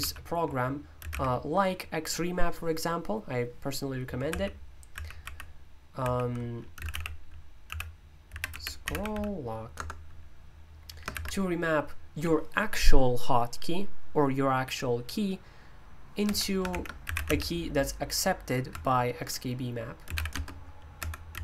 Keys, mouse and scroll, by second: 0.7-1.5 typing, 4.3 ctrl+i, 4.9 ctrl+i, 5.2 ctrl+o, 6.5-11.1 typing, 16.2 Escape, 16.4-18.7 typing, 19.8-21.4 typing.